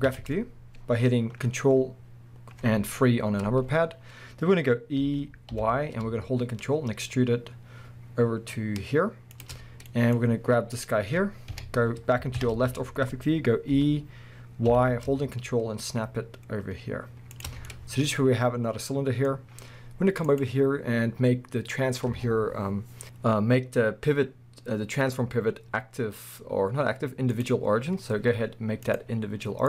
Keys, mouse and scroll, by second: 0.1 ctrl+KP_3, 2.3-3.6 scroll up 2, 3.6-5.0 scroll up 1, 5.0 e, 9.5 ctrl+click, 9.9-10.7 middle drag, 10.7 click, 11.5 KP_1, 12.4 ctrl+KP_3, 13.2 scroll up 1, 13.7 e, 17.4 ctrl+click, 17.5 scroll down 1, 17.7-20.3 middle drag, 19.4-20.3 scroll up 2, 20.3-29.6 drag.